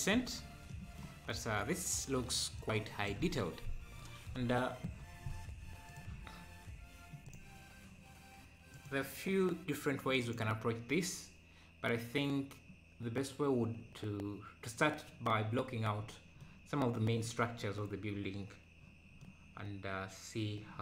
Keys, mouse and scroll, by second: 0.7-2.9 middle drag, 2.9 click, 3.5 scroll down 1, 7.3-11.0 drag, 11.0-11.4 scroll up 1, 13.9 scroll down 2, 16.0-16.4 scroll up 3, 16.4-17.7 middle drag, 17.7-18.1 scroll down 4, 18.1-18.8 scroll up 1, 18.8-19.2 scroll up 1, 19.2-20.8 middle drag.